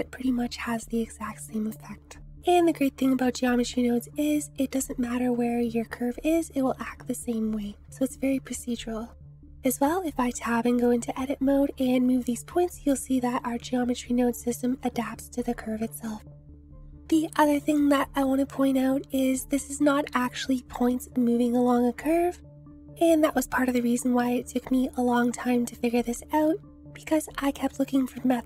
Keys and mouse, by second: 2.4 Escape, 2.4 space, 3.4 g, 9.1 Escape, 9.6 Tab, 10.3 click, 11.8 g, 17.7-18.2 drag, 18.5 click, 19.7-20.1 drag, 22.5 shift+click.